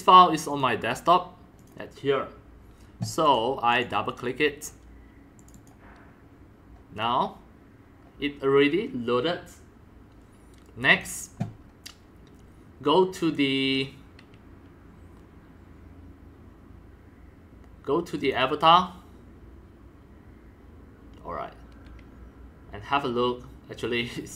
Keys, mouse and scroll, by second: 1.6 click, 3.2 click, 3.7 click, 5.4 click, 8.0-10.7 drag, 10.9 click, 11.1-16.0 drag, 18.2 click.